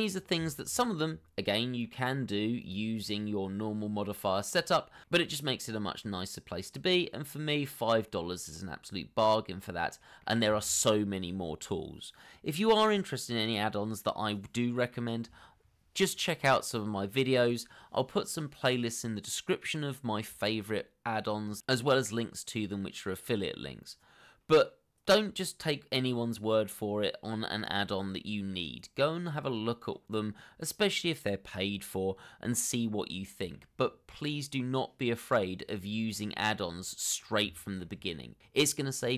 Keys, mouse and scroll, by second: 0.8 scroll down 1, 1.2 shift+middle click, 2.1 middle click, 5.2 middle click, 5.9 scroll down 1, 6.1 shift+middle click, 6.5 middle click, 37.1 middle click, 38.4 shift+middle click, 38.8 middle click.